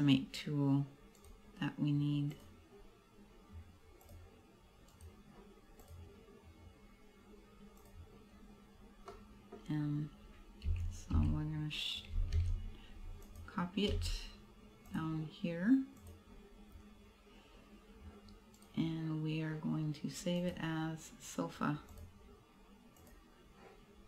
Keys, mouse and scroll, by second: 1.3 right click, 2.3 click, 5.0 right click, 5.8 click, 9.2 middle click, 9.8-10.5 scroll up 1, 10.8 a, 11.2 a, 12.5 shift+d, 13.5 click, 14.0 m, 16.0 click, 16.7-17.2 scroll up 1, 18.7 right click, 20.4 click.